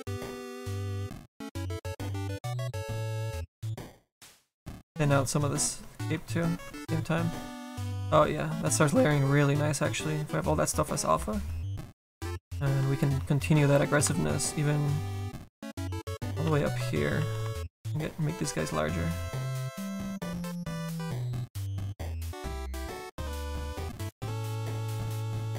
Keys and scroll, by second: 16.2 s, 16.6 s, 17.2 s, 20.9 s.